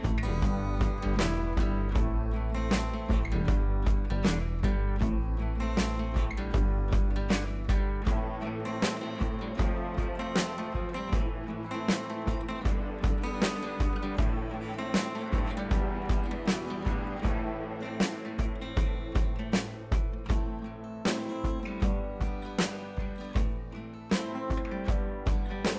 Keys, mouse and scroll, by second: 1.2 ctrl+z, 4.3 click, 5.7 click, 6.9 click, 8.9 scroll down 1, 9.1 [, 9.3 [, 9.4 ], 9.6 click, 10.2 ], 10.3 click, 11.8 scroll up 1, 11.9 [, 12.0 [, 12.1 click, 13.3 scroll up 1, 13.8 click, 15.6 [, 15.7 [, 15.8 click, 18.2 click, 23.0 scroll down 1, 23.4 ], 23.5 ], 23.7 scroll up 1, 24.4 [, 24.9 click.